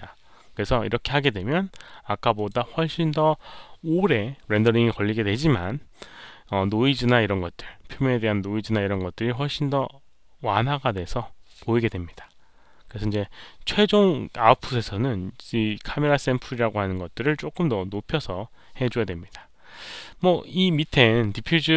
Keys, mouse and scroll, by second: 2.3 click, 4.7 click.